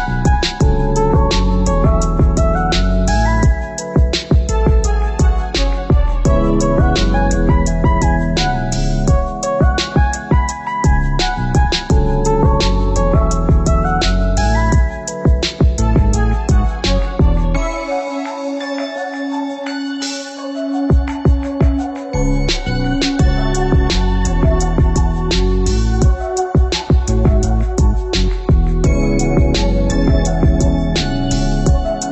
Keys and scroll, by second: 18.7 ctrl+c, 18.9 ctrl+v.